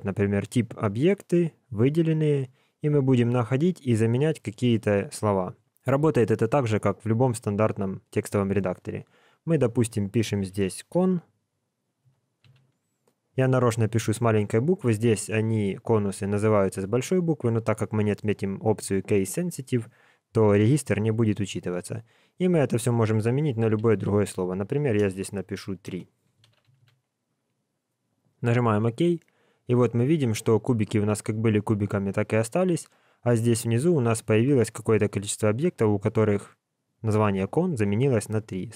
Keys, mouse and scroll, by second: 0.7 click, 29.8 scroll up 1, 29.9 scroll down 1, 31.5 scroll up 5, 31.7-34.5 scroll down 20.